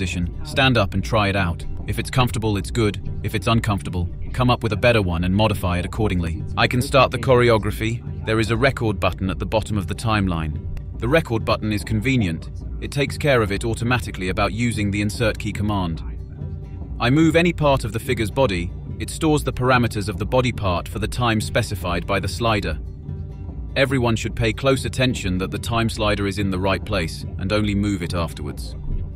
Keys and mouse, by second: 7.9 click, 8.0 click, 8.2 drag, 8.9 click, 9.1 click, 9.8 click, 10.4 click, 10.9 click, 11.2 click, 11.8 click, 12.2 drag, 13.2 click, 13.4 click, 13.5 click, 14.7 click, 15.0 click, 15.2 click, 16.0 click, 16.2 click, 16.4 click, 16.7 click, 17.0 click, 17.2-18.2 drag, 18.4 click, 18.7 click, 19.1 click, 20.1 click, 20.5 click, 21.1 click, 21.3 KP_Decimal, 21.6 click, 22.4-24.2 drag, 24.6 click, 24.9 click, 25.4 click, 25.7 click, 26.6-27.7 drag, 27.7 click, 28.4 click.